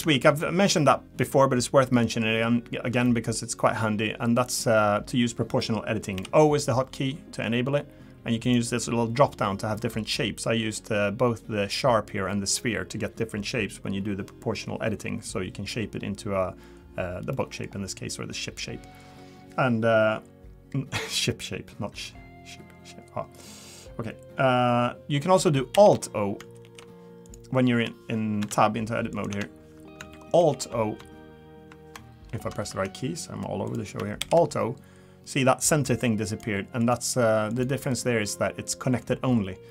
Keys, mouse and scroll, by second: 0.0 Tab, 0.4 middle click, 0.8 scroll down 2, 2.0 scroll down 1, 2.1 middle click, 3.4 middle click, 6.1 o, 8.4 click, 17.3 middle click, 17.8 scroll up 2, 25.7 alt+o, 26.5 alt+o, 27.2 click, 29.1 click, 29.3 Tab, 34.2 alt+o, 36.3 click, 36.8 click, 37.5 click.